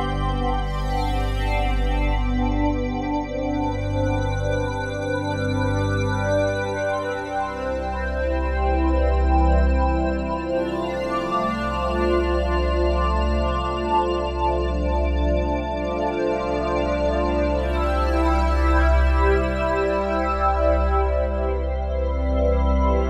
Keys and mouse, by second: 1.4 n, 2.7-3.8 drag, 4.2 click, 4.9 click, 5.5 click, 7.2 click, 8.6-10.8 ctrl+alt+drag, 10.6-11.8 typing, 13.1-14.1 drag, 14.2-15.5 typing, 16.6-19.0 drag, 19.0 typing, 21.1-23.0 drag.